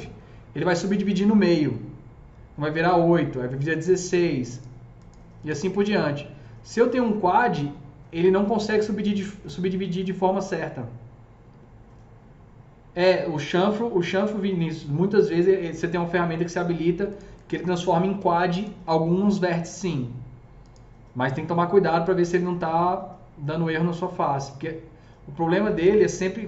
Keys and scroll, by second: 0.0-0.3 typing, 18.1 Delete.